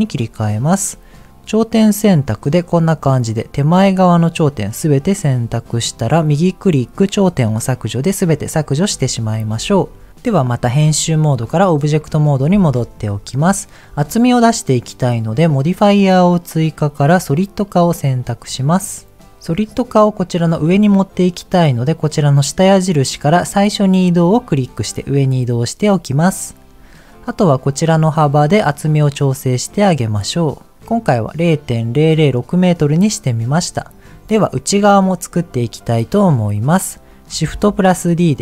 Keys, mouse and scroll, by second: 1.2 click, 4.1-5.8 middle drag, 6.2-7.7 right drag, 7.7-8.8 middle drag, 10.9 Tab, 12.2 click, 12.6 middle click, 22.2-24.6 drag, 28.2-30.7 shift+drag, 33.8 middle click, 36.2 middle click, 37.4 shift+d.